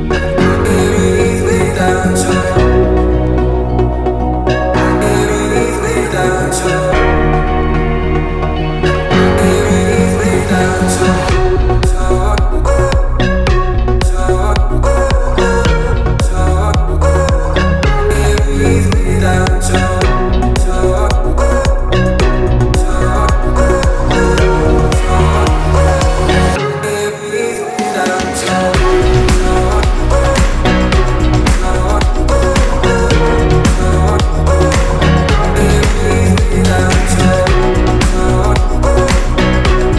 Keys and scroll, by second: 1.1 t, 12.6-13.6 typing, 23.9 1, 24.1 Return, 25.3 r, 27.3 space, 28.2 p, 31.4-32.8 typing, 34.1 b, 36.6 v, 37.9 Escape.